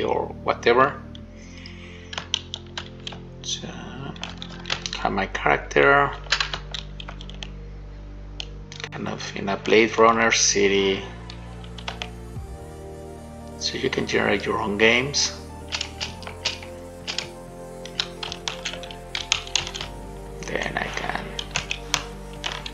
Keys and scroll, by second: 2.8-4.6 typing, 6.8-7.7 typing, 9.9 shift+w, 12.0 shift+a, 15.1 space, 16.0 space, 16.4 space, 18.2 w, 19.5 w, 22.5 shift+a.